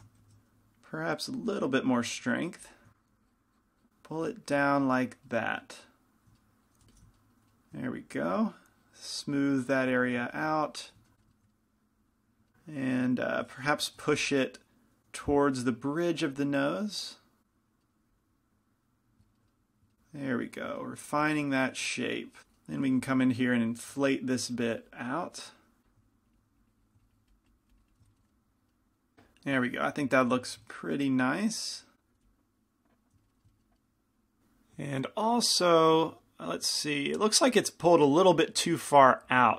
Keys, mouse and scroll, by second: 0.5 shift+f, 1.9 f, 2.6 f, 3.2-6.7 drag, 5.0-6.2 right drag, 6.2 middle click, 7.1 f, 8.5-11.8 drag, 10.1 f, 14.2 g, 14.2 f, 15.3 f, 16.9-18.0 drag, 18.8-19.8 drag, 21.5 f, 22.4 f, 22.4 i, 23.1 f, 23.6-26.5 drag, 24.3 shift+f, 27.9 click, 30.3 g, 30.3 f, 31.8 click, 32.3 f, 34.5 ctrl+shift+s, 34.5 KP_Add, 34.5 KP_Enter, 35.9-39.5 middle drag.